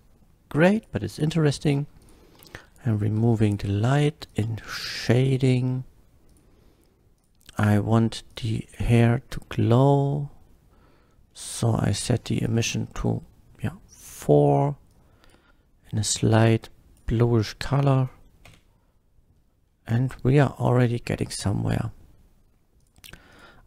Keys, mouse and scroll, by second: 0.8 click, 2.0 click, 2.5 x, 3.4 click, 3.4 x, 4.3 click, 5.0 click, 6.3 click, 7.1 click, 8.3 click, 9.4 middle click, 9.8 middle click, 11.3 middle click, 11.9 click, 12.5 KP_4, 12.6 Return, 13.9 Return, 13.9 click, 14.9-15.3 drag, 16.1-17.0 drag, 17.3-17.8 middle drag, 18.5 F12, 21.4 click, 22.8 click, 23.3 click.